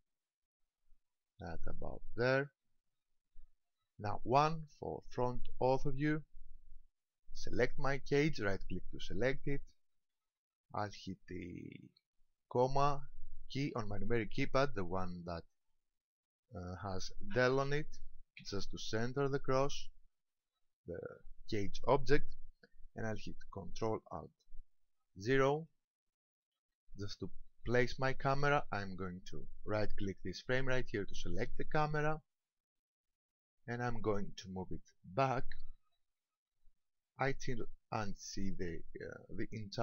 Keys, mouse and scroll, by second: 2.3 ctrl+click, 5.9 KP_1, 7.6 right click, 18.4 KP_Decimal, 25.2 ctrl+alt+KP_0, 31.5 right click, 33.9 click, 35.2 click.